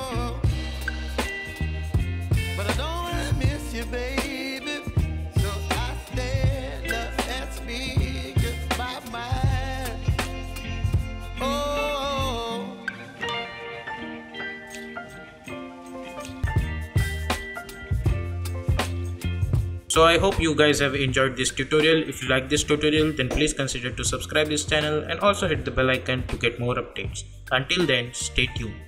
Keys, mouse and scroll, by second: 14.0 space.